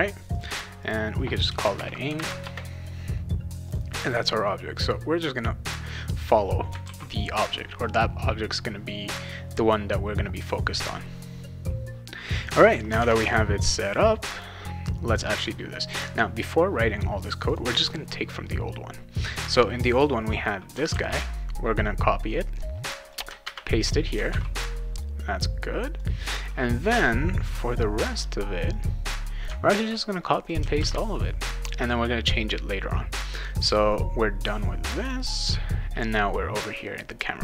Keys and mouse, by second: 0.3 click, 0.8 click, 1.5-2.7 typing, 3.7 click, 4.0 click, 4.7-5.9 drag, 6.8 ctrl+s, 12.6 click, 13.0 alt+Tab, 14.3 click, 15.0 click, 17.5 click, 19.8 click, 20.9 ctrl+c, 23.1 click, 23.4 ctrl+v, 24.3 ctrl+s, 26.0 click, 28.7 click, 29.7 ctrl+c, 30.5 click, 30.8 ctrl+v, 33.9 click, 35.0 click.